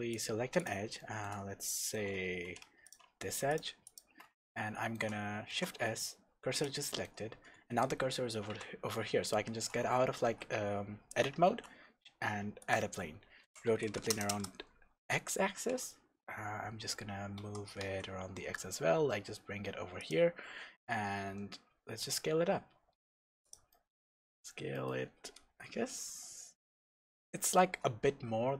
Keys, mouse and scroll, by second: 0.1 click, 0.6 click, 1.0-2.5 shift+middle drag, 1.4-1.7 scroll down 2, 2.5 2, 2.8 click, 3.5 shift+click, 3.8 shift+click, 4.4-9.9 shift+middle drag, 5.5 shift+s, 6.8 scroll up 1, 8.5 Tab, 10.3 alt+a, 11.5 shift+a, 13.4 r, 14.4 KP_Enter, 17.4 g, 20.1 click, 20.8 s, 23.5 click, 23.9 scroll down 1, 24.1-28.5 middle drag, 24.3 scroll up 1, 25.5 KP_0, 26.2 scroll up 1.